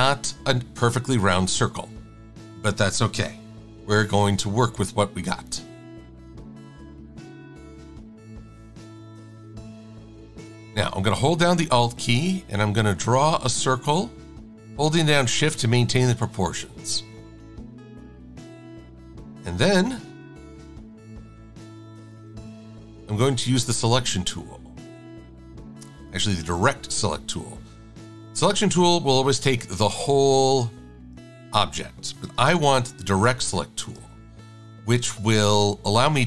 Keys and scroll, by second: 5.1 Caps_Lock, 6.2 Tab, 7.8 shift+Caps_Lock, 17.8 shift+x.